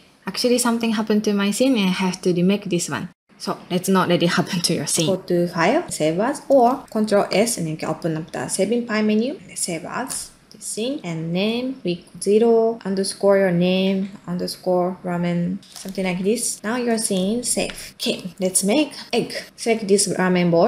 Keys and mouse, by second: 1.4 middle drag, 1.9 middle click, 2.4 ctrl+middle click, 3.1-3.4 ctrl+middle drag, 3.4 ctrl+click, 4.1 middle click, 4.6 ctrl+middle click, 7.3 ctrl+s, 16.6 ctrl+middle click, 17.9 ctrl+middle click, 18.2 middle click, 18.5 ctrl+middle click, 19.4 middle click, 20.1 middle click.